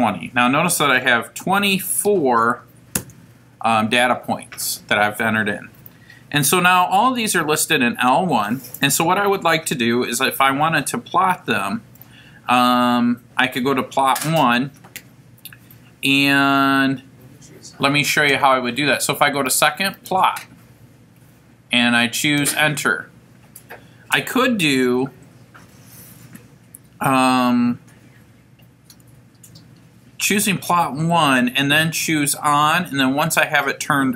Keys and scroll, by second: 3.0 Return, 22.2 Return.